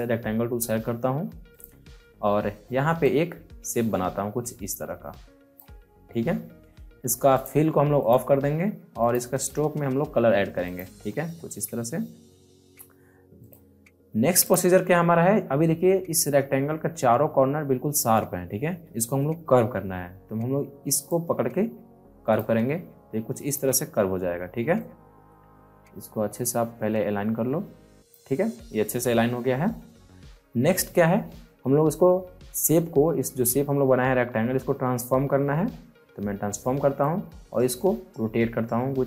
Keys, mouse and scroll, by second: 3.0-7.3 shift+drag, 13.4 click, 21.0-24.7 drag, 24.7-30.6 drag, 34.8 ctrl+Num_Lock, 35.4 ctrl+t, 37.0-39.0 shift+drag.